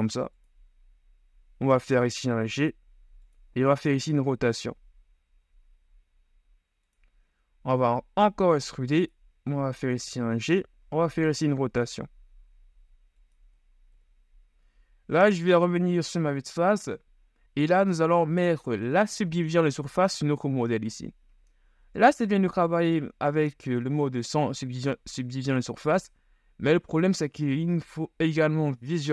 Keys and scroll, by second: 2.3 g, 3.8 r, 8.0 ctrl+e, 9.4 g, 10.9 r, 14.1 KP_1, 14.8 z, 22.1 KP_1.